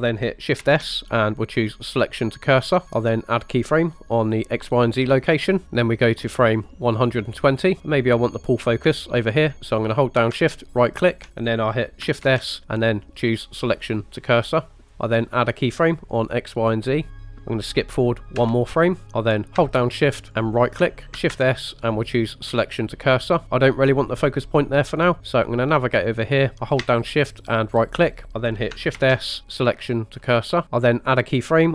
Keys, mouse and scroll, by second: 0.6 shift+s, 2.8 ctrl+z, 2.8 click, 4.2 click, 7.4 click, 11.1 shift+right click, 12.3 shift+s, 16.7 click, 18.4 Right, 20.6 shift+right click, 21.3 shift+s, 27.8 shift+right click, 29.0 shift+s, 30.6 ctrl+z.